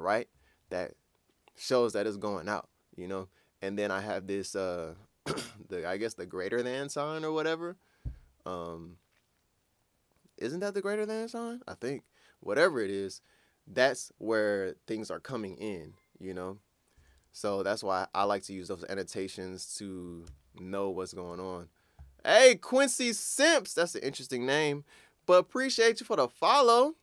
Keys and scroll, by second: 20.3 super+Tab.